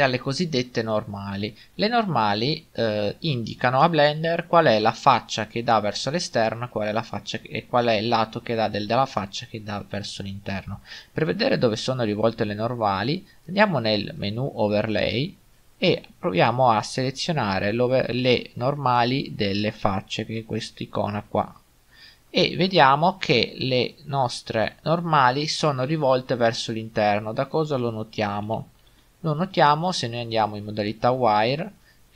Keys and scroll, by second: 28.5 z.